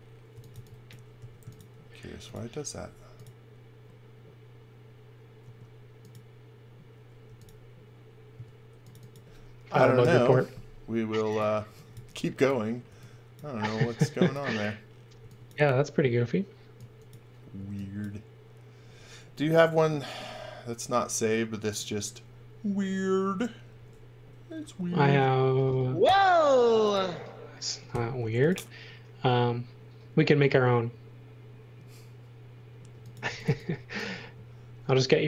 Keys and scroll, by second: 0.0-1.1 typing, 2.7 f, 5.4 space, 7.2 m, 8.3 space, 10.0 Delete, 11.4-13.6 typing, 15.1 x, 16.7 x, 20.2 r, 26.0 r, 26.5 space, 27.9 f, 33.0-33.9 typing.